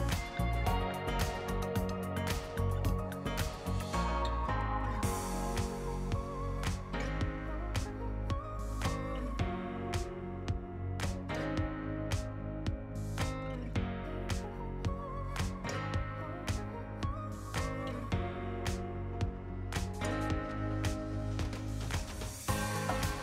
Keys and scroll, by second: 2.9 t, 8.9 r, 15.3 t, 17.4 r, 18.1 shift+Return, 18.5 t, 19.1 Left, 19.2 t, 22.3 t.